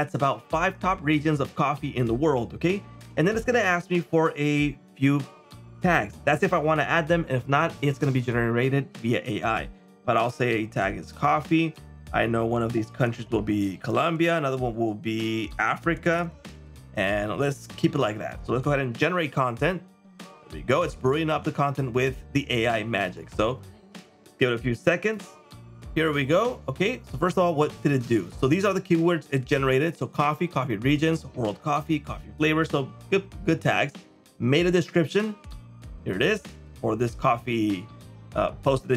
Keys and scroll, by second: 36.8 super+m.